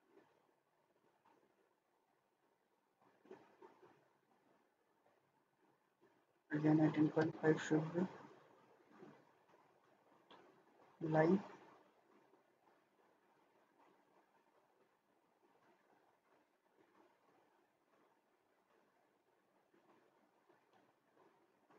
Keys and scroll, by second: 6.3-6.9 typing, 7.2 Return, 8.3 Escape, 20.4 Escape.